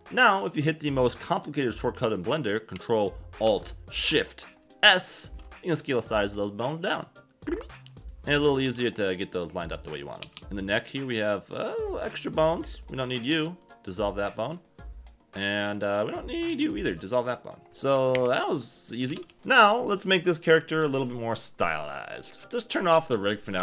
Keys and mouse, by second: 4.8 ctrl+alt+shift+s, 5.4 ctrl+alt+shift+s, 8.0 click, 8.6 g, 9.9 click, 10.2 a, 10.3 a, 11.4 click, 12.2 click, 13.3 x, 16.5 x, 17.7-19.1 typing.